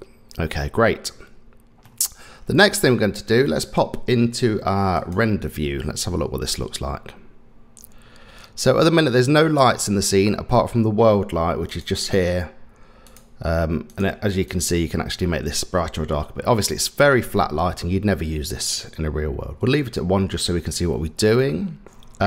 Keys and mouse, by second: 1.8-2.3 middle drag, 5.2-5.8 drag, 9.0-10.6 middle drag, 13.0 click, 14.6-20.8 drag.